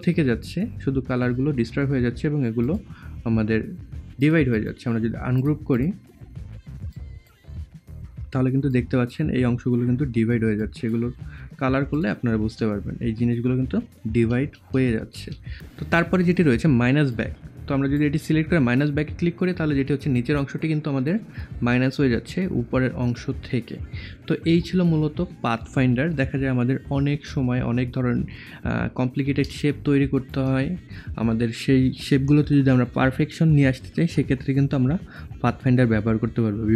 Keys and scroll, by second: 14.1 ctrl+z.